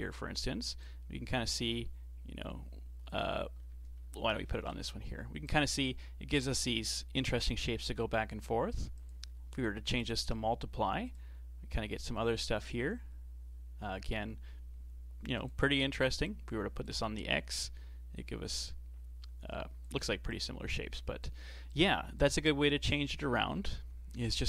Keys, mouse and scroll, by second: 0.8-3.9 drag, 4.1-8.5 alt+drag, 9.0-14.2 drag, 16.3-21.8 alt+drag, 22.9 click.